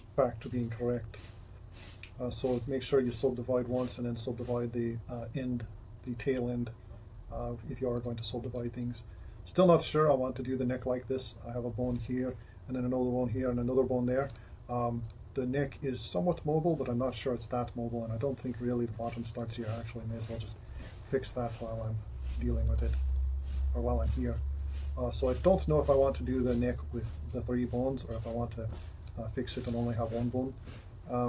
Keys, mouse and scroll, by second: 12.6 ], 13.4 ], 19.3 g, 21.8 s, 22.7 g, 24.8 s.